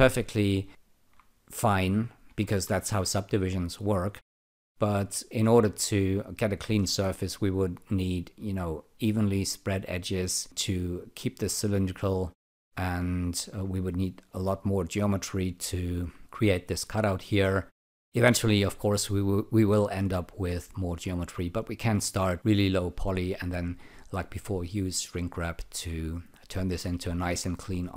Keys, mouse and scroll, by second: 0.7 alt+click, 2.3 ctrl+z, 12.3 alt+click, 15.1 alt+click, 17.9 alt+click, 22.5-26.6 alt+drag.